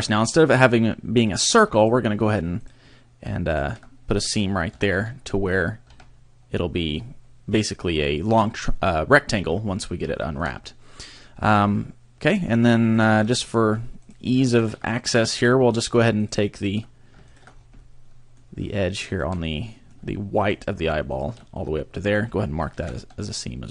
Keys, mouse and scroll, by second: 1.8 shift+right click, 2.6 shift+right click, 3.5 shift+right click, 4.7 ctrl+e, 6.0 a, 9.7-10.2 scroll down 2, 10.2 shift+middle click, 11.6 scroll up 2, 13.0 right click, 13.5 shift+right click, 14.0 right click, 14.6 right click, 15.0 middle click, 15.8 shift+right click, 16.2 shift+right click, 16.6 shift+right click, 17.3 shift+right click, 17.5 scroll down 3, 17.8 middle click, 19.1 shift+right click, 19.4 middle click, 20.4 shift+right click, 21.1 shift+right click, 21.6 middle click, 22.8 ctrl+e.